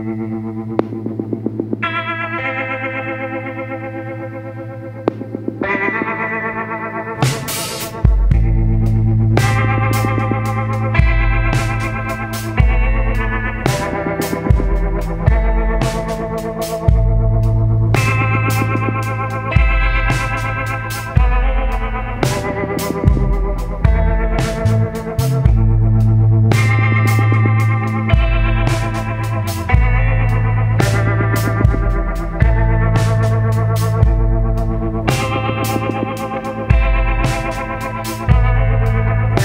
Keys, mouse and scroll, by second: 5.0-14.2 drag, 15.3 click, 18.7 click, 23.7 shift+click, 26.7 Escape, 31.2 click, 32.7 Delete, 37.9 click.